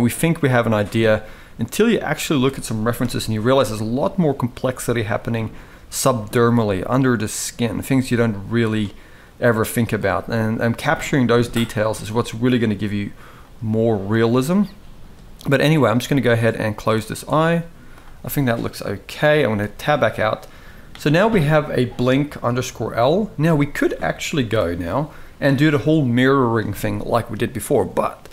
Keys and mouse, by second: 0.3 click, 0.5 g, 2.7 KP_1, 4.0 click, 4.7 g, 5.9 click, 6.1 g, 7.6 g, 9.0 g, 10.6 click, 11.2 g, 12.2 click, 12.5 g, 14.2 click, 14.4 g, 15.6 g, 17.0 g, 19.2 Tab, 22.0-25.1 drag.